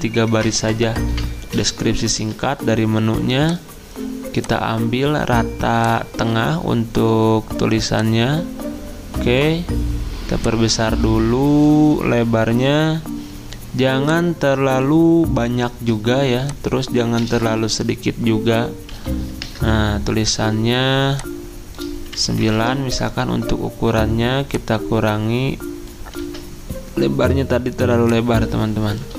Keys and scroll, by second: 0.4 BackSpace, 1.1 BackSpace, 2.2 ctrl+a, 18.9-19.4 typing, 22.3-23.1 typing, 26.2 ctrl+z.